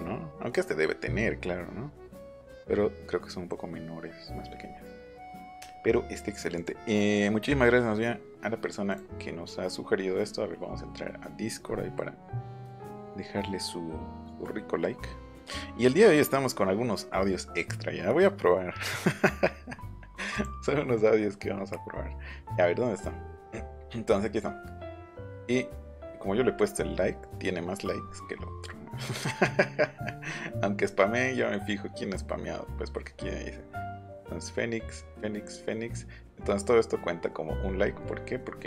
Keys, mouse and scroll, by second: 6.6 click, 8.9 click, 20.3 click, 22.2-22.7 scroll up 2, 22.9-23.9 scroll down 8, 24.6 scroll down 2, 27.7-28.7 scroll down 8, 29.8-30.8 scroll down 10, 37.6-38.6 scroll down 8.